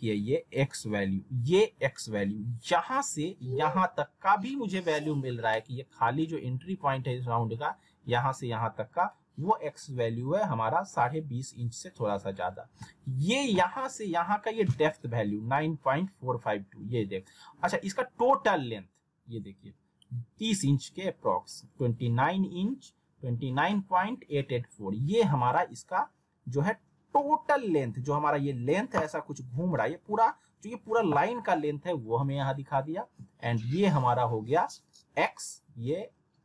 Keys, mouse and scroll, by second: 33.0-34.8 scroll up 1.